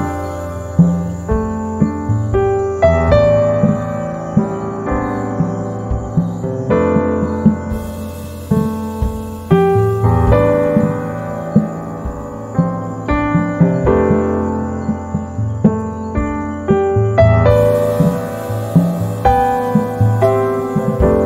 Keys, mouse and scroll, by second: 1.4-3.1 drag, 3.1 space, 3.6-6.8 drag, 6.8 ctrl+z, 7.0-21.2 drag.